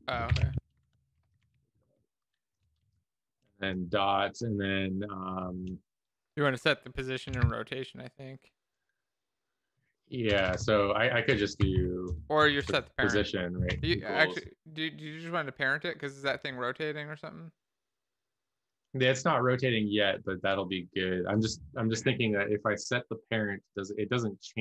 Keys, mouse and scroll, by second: 0.4-2.0 typing, 2.8 Left, 2.8 Down, 7.6-8.3 typing, 10.9-14.3 typing.